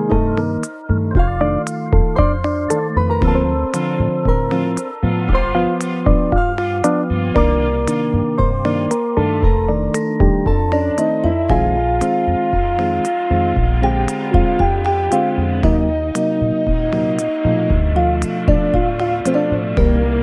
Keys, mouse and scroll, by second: 1.1 alt+z, 11.4-11.9 scroll up 4, 14.8 right click, 16.2 scroll down 1.